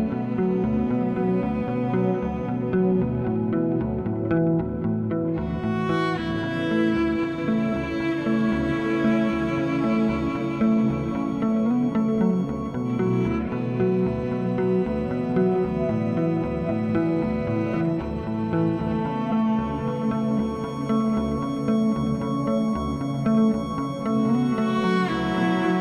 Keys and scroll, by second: 10.6 2, 22.4 1, 24.6 s.